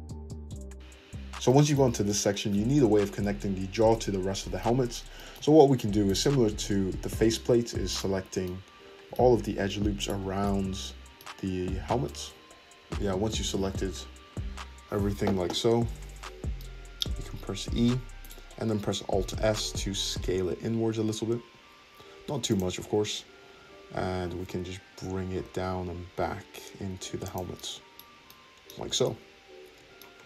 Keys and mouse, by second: 7.2 Tab, 7.9 alt+click, 10.0 alt+shift+click, 10.2-11.4 middle drag, 12.9 ctrl+z, 15.9 `, 17.5 e, 19.0 alt+s, 22.0-30.2 shift+middle drag, 22.8 `, 24.1 g, 28.8 Tab.